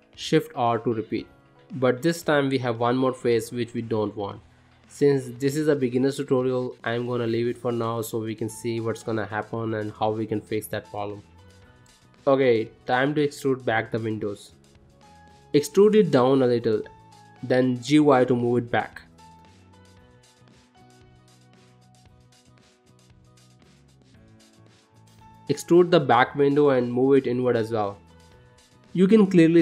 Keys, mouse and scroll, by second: 0.8 shift+r, 1.4 middle click, 2.0-2.6 scroll up 2, 2.6 scroll down 2, 3.0 shift+middle click, 3.7 ctrl+middle click, 4.8 middle click, 6.1 middle click, 7.0 s, 8.6 shift+middle click, 9.3 middle click, 10.1 shift+middle click, 10.6 middle click, 11.3 ctrl+middle click, 11.7 middle click, 12.4 click, 13.3 middle click, 14.7 e, 16.0 g, 19.5 middle click, 22.2 shift+middle click, 22.8 middle click, 23.3 shift+middle click, 24.2 middle click, 24.7 ctrl+middle click, 25.1 click, 25.8 e, 26.7 g, 29.0 middle click.